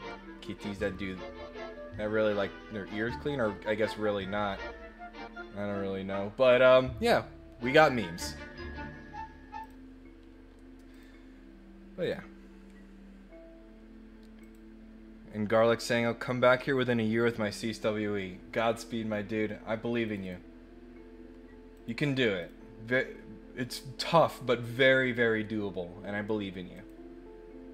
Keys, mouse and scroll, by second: 9.6 click, 10.9 click, 12.0 click, 14.4 click, 20.0 click, 20.2 click, 21.7 click, 22.4 click, 26.7 click.